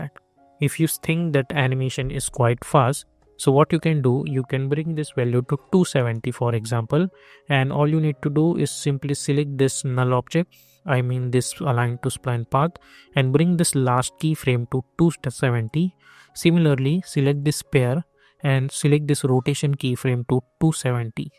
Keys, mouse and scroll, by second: 3.5 click, 3.6 click, 5.9 Return, 9.1 click, 13.2-21.3 drag.